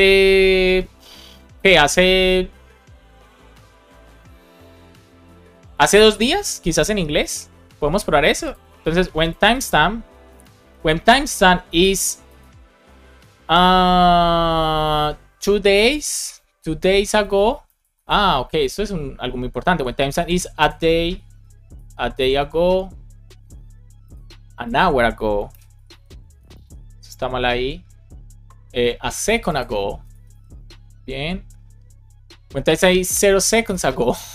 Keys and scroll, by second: 8.7 super+c, 10.2 Return, 10.5 super+v, 15.4 BackSpace, 16.8 Right, 17.5 space, 21.2 space, 25.8 alt+Right, 26.2 space, 29.9 space, 34.1 space.